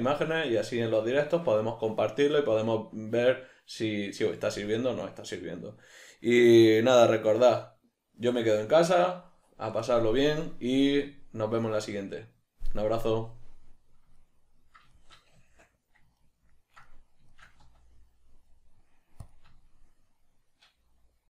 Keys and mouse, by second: 15.4 Tab, 17.6 z.